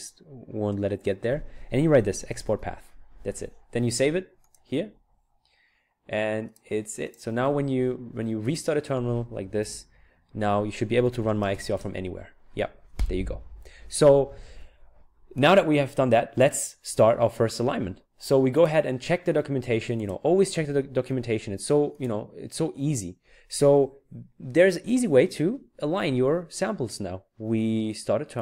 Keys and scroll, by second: 1.9-2.8 typing, 9.6 ctrl+alt+t, 10.7-12.0 typing.